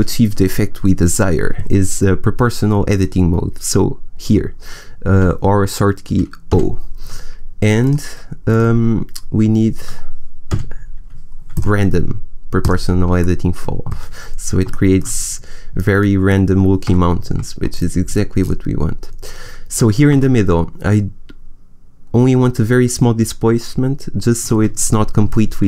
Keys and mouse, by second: 6.4 o, 7.7-9.6 drag, 10.4 o, 11.4-13.1 drag, 13.1 middle click, 14.3 middle click, 16.2 middle click, 16.7 g.